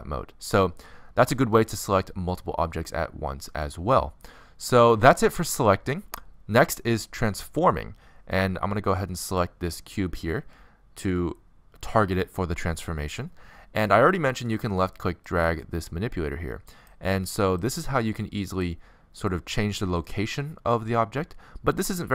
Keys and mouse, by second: 2.3-4.1 middle drag, 6.4-10.0 middle drag, 10.0-11.7 drag, 15.0-16.7 drag, 17.8-19.4 drag, 19.4 middle click, 20.0-21.7 drag, 21.7 middle click.